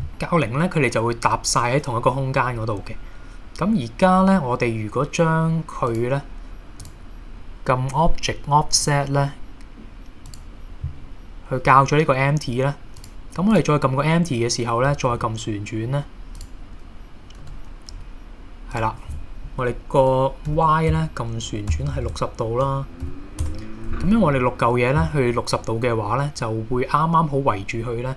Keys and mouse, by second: 5.9 click, 6.8 click, 8.8 click, 15.1 r, 16.4 click, 17.4 n, 18.8-24.1 drag, 21.8 BackSpace, 22.1 BackSpace.